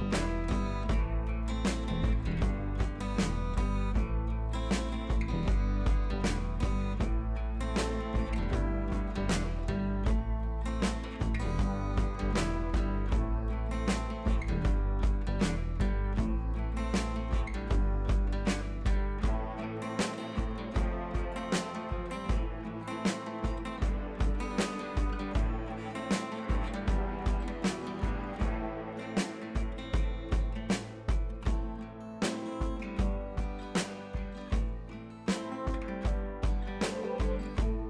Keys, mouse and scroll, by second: 6.2 scroll down 1, 6.3-7.0 drag, 11.8-13.1 drag, 16.3 ctrl+t, 16.9-17.7 alt+drag, 22.3-22.9 scroll up 1, 22.9 click, 23.2 ctrl+t, 23.8-24.1 click, 24.6-25.1 scroll down 1, 25.1-25.4 scroll up 1, 25.4 click, 26.0 p, 26.1 scroll down 1, 27.0 Caps_Lock, 27.2-28.2 click, 33.5 ctrl+d, 34.4 click, 35.9 click.